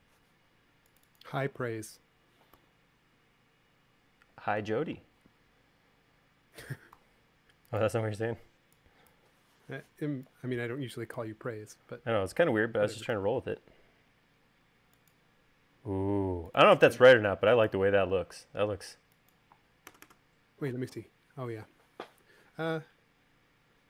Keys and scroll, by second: 2.7 u, 7.1 v, 13.4 u, 20.1 space.